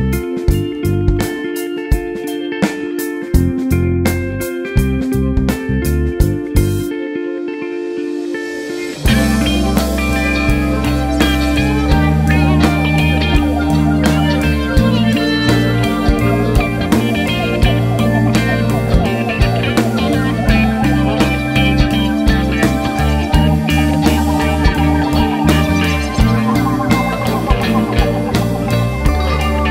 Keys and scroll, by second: 4.8-6.4 typing, 10.8 ].